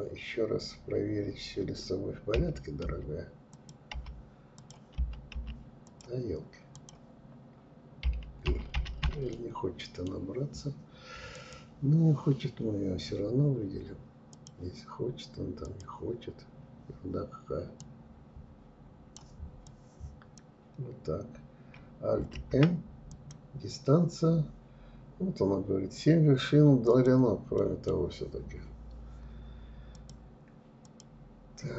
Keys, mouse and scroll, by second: 2.6 click, 3.0 l, 3.6 click, 4.9 click, 5.8 click, 8.4-10.4 middle drag, 10.4-14.9 drag, 16.8-18.7 drag, 25.9 click, 26.6 middle click, 29.0 click, 29.9-30.6 drag, 31.1-31.5 scroll up 2.